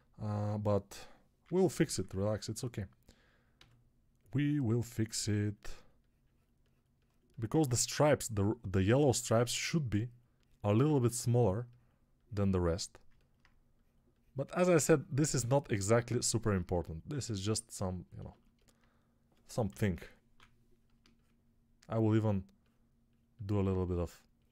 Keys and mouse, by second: 0.0-1.9 typing, 3.4 s, 17.4-20.8 alt+drag, 17.4-20.8 alt+middle drag, 17.4-20.8 alt+right drag, 19.5 ], 20.1 ], 20.1 ], 20.2 ].